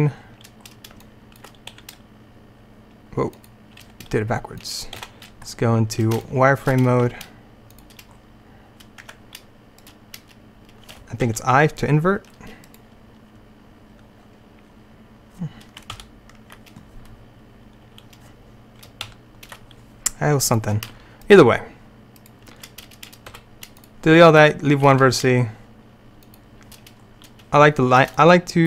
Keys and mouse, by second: 1.8 s, 3.9 g, 5.0 z, 7.1 s, 9.1 Tab, 11.3 i, 16.0 ctrl+u, 19.1 alt+i, 22.6-25.4 right drag, 23.4 x, 25.0 g, 25.7 right click, 26.2 click.